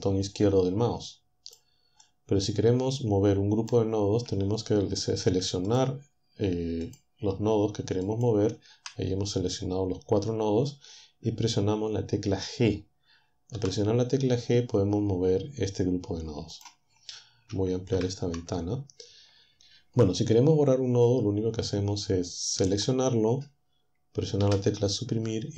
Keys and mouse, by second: 1.2-4.2 drag, 4.9 shift+click, 6.0 shift+click, 7.2 shift+click, 12.8 g, 15.7 click, 17.3 ctrl+Up, 21.2 click, 23.1 Delete.